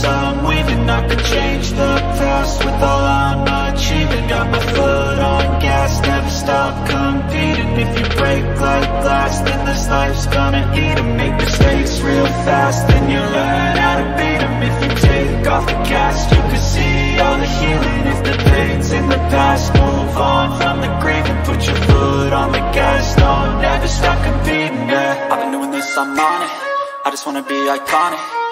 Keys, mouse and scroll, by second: 2.4-5.4 drag, 22.2 click, 22.8-23.3 drag, 24.2 ctrl+c, 24.4 click, 25.2 ctrl+v, 27.1-28.0 drag.